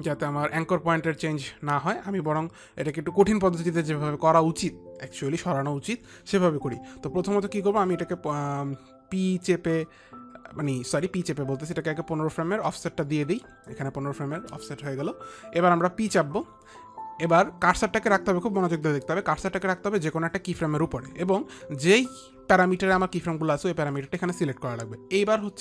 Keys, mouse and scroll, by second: 10.2 click, 14.1 click, 16.5 p.